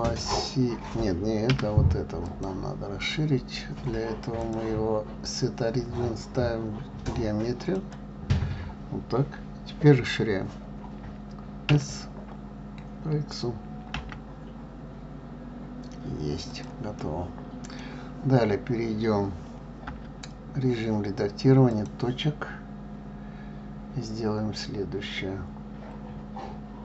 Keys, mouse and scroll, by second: 2.6 click, 4.7-7.7 drag, 12.0 s, 17.3-20.2 middle drag, 20.2 Tab, 22.0 click.